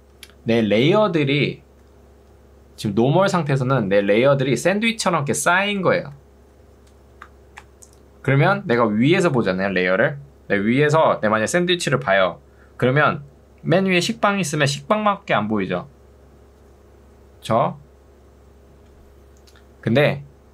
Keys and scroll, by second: 0.0 Escape.